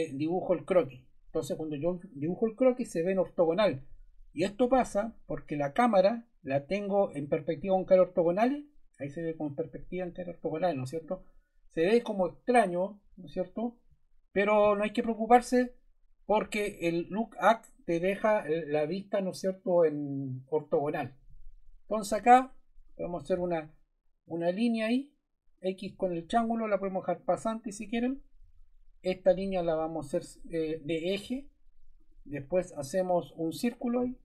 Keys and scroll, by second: 28.4 Escape.